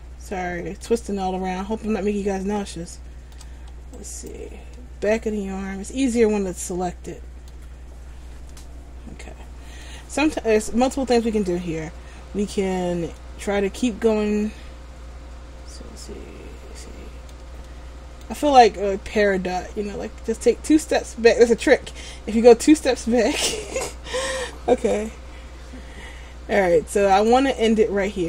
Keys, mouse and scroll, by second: 1.2 scroll up 4, 2.8 shift+middle click, 2.9 shift+middle click, 4.1 alt+right click, 4.9 middle click, 8.7 middle click, 13.4 middle click, 17.8 middle click, 24.9 k.